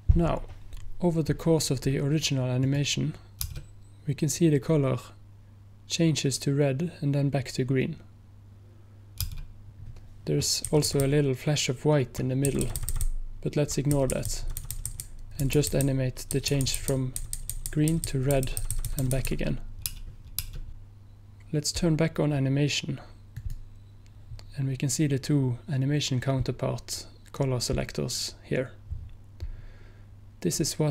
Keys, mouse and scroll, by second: 10.7 Right, 11.0 Right, 11.1 Right, 11.6 Right, 23.4 click.